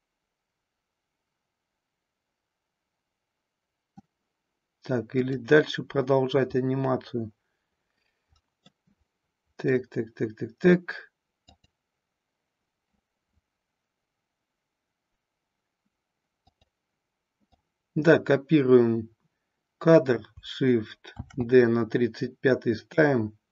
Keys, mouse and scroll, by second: 5.1 click, 8.7-9.8 middle drag, 11.5 click, 16.6 click, 17.4-18.1 drag, 21.2 shift+d.